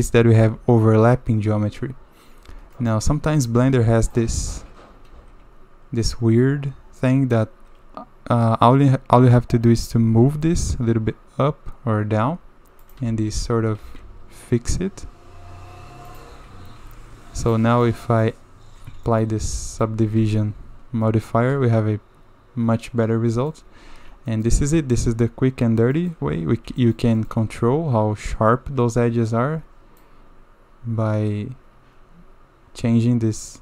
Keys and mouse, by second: 0.5 Tab, 1.0 Tab, 2.5 Tab, 2.7 middle click, 3.0 1, 3.6 shift+z, 4.1 ctrl+right click, 5.1 shift+z, 5.5-6.2 middle drag, 8.4 middle click, 9.9 g, 13.1 shift+z, 13.8 g, 16.3 shift+z, 16.8 Tab, 17.4 click, 17.8 middle click, 19.1 shift+middle click, 19.6 drag, 20.2 ctrl+2, 21.0-23.5 drag, 24.4 shift+click, 25.9 middle click, 26.3 Tab, 26.8-27.3 shift+middle drag, 27.4 Tab, 30.0-33.6 shift+middle drag.